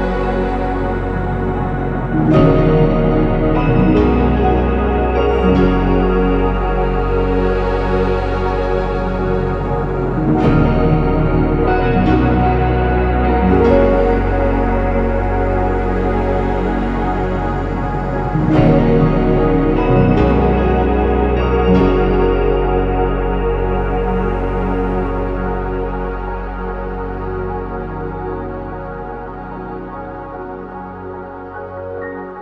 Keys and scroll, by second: 5.1-8.2 typing, 10.0 BackSpace, 10.6 ctrl+z, 10.8 ctrl+z, 10.8 ctrl+z, 11.0 BackSpace, 12.2 ctrl+z, 16.7 ctrl+z, 20.3 ctrl+z, 24.8 typing, 24.8 Return, 25.9 Escape, 30.7-31.7 typing, 31.7 Return.